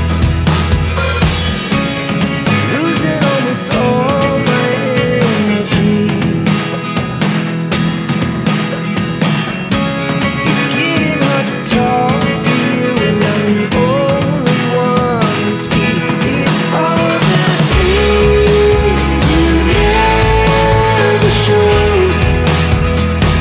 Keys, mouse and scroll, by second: 0.9 ctrl+v, 3.0 click, 5.5 click, 6.4 double click, 8.7 click, 9.9 click, 11.4 click, 12.6 click, 14.2 click, 16.1 click, 16.5 double click, 16.9 scroll up 1, 17.8-18.4 scroll down 1, 18.7 click, 19.3 alt+click, 22.6 scroll down 1.